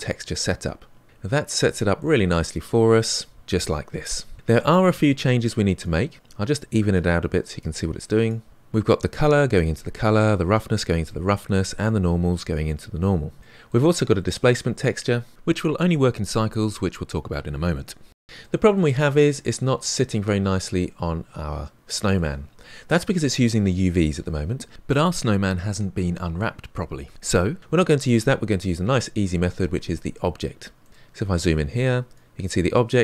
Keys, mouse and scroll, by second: 0.0 ctrl+shift+t, 6.4-19.1 drag, 19.1-22.1 middle drag, 32.1-33.0 drag.